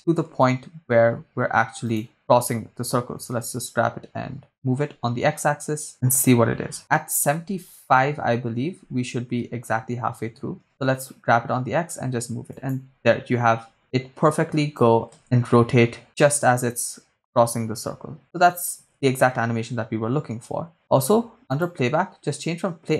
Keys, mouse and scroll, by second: 0.8 g, 2.1 shift+drag, 2.1 right click, 2.2 shift+right click, 3.1 g, 4.9 x, 5.9 click, 8.2 Left, 8.7 Left, 10.1 g, 10.7 x, 12.5 click, 13.8-15.2 drag, 15.3 shift+space, 18.9 shift+space.